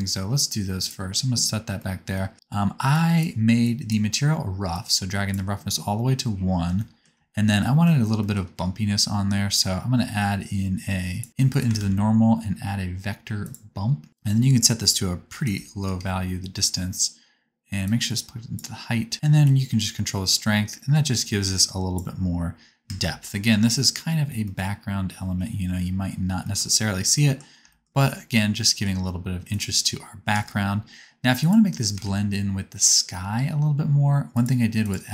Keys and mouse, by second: 11.7 shift+a, 14.1 click, 18.6-22.1 drag, 22.8 KP_0, 25.8-27.9 drag, 28.9 click, 30.3 KP_0, 31.4 click, 32.0 shift+a.